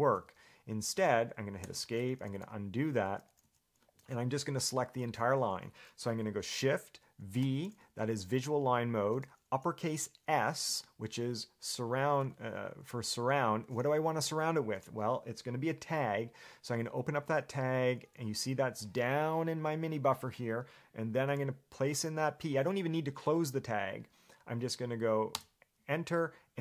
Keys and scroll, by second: 1.8 Escape, 2.3-3.6 typing, 7.6 shift+v, 17.4 shift+s, 21.5 p, 25.6 Return.